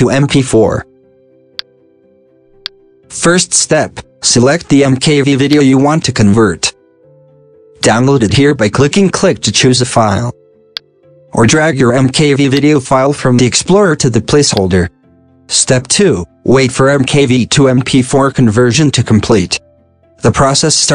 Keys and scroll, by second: 0.0-1.4 typing.